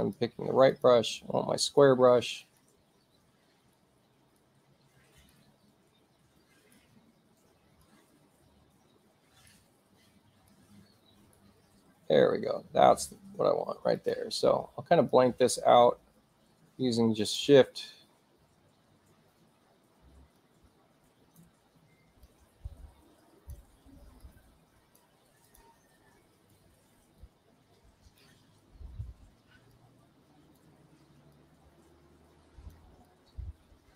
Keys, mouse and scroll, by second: 0.1 click, 0.8 click, 1.8 alt+right click, 3.8 alt+right click, 5.4-6.8 alt+right drag, 8.0-9.5 alt+right drag, 10.6 alt+right click, 14.0 alt+click, 15.1-17.4 shift+drag, 20.4-21.4 drag, 22.3-23.6 shift+drag, 24.3 click, 25.5 click, 26.6-28.3 shift+drag, 29.8 click, 31.4-32.8 drag, 33.1-33.9 drag.